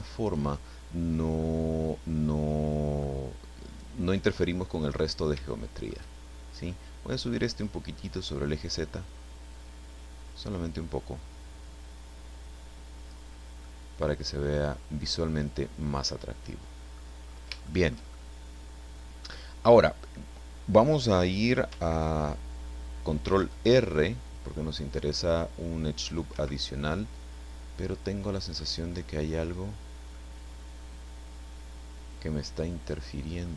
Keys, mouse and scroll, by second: 0.2 right click, 1.4-3.2 middle drag, 3.6 right click, 5.5-6.1 shift+middle drag, 7.6-13.3 drag, 13.6-17.2 middle drag, 17.6 shift+middle click, 18.4 middle click, 23.2 ctrl+r, 26.3 Escape, 26.8-28.8 middle drag, 30.1-31.6 middle drag, 31.6-33.2 right drag, 33.2 click.